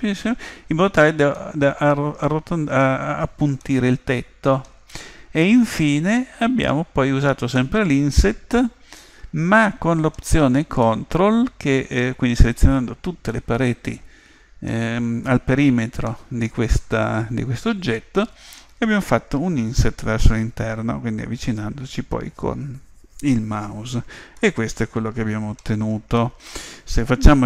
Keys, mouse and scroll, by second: 1.4-3.2 middle drag, 3.6-5.4 middle drag, 5.5-7.3 middle drag, 7.6-10.7 middle drag, 12.5 middle click, 13.3-18.6 middle drag, 24.4-26.4 middle drag.